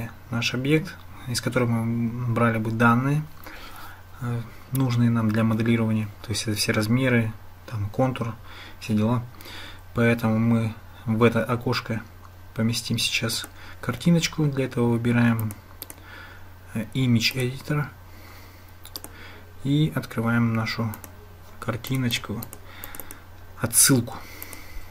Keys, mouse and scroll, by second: 13.5-15.7 drag, 15.9-17.4 drag, 19.0 click.